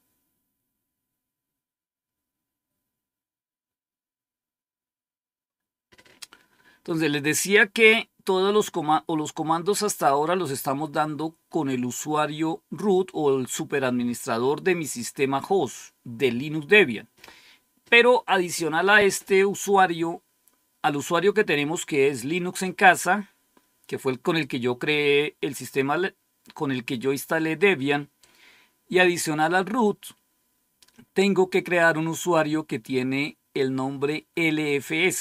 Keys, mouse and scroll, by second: 18.9 click.